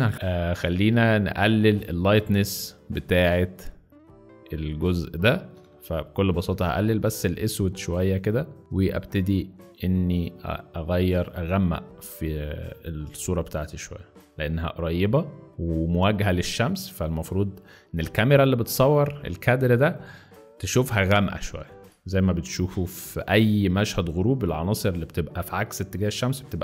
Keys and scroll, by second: 1.4 space, 4.9 z, 5.6 space, 21.8 alt+z, 23.8 alt+space.